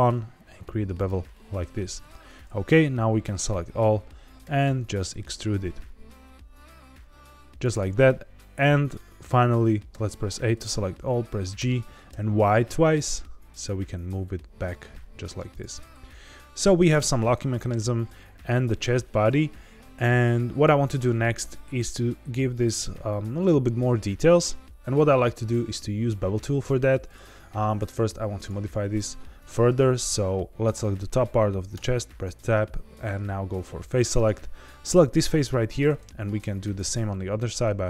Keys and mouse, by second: 0.9 click, 1.3 middle click, 2.0 a, 3.1 a, 4.4 e, 7.5 click, 9.9 a, 11.5 g, 12.0 y, 12.6 y, 15.5 click, 15.7-16.8 middle drag, 16.9 Tab, 17.2-17.6 middle drag, 18.1-18.4 middle drag, 18.7 shift+middle click, 28.3 click, 31.7 Tab, 33.5 click, 34.2 click, 35.8 middle click, 36.6 shift+click.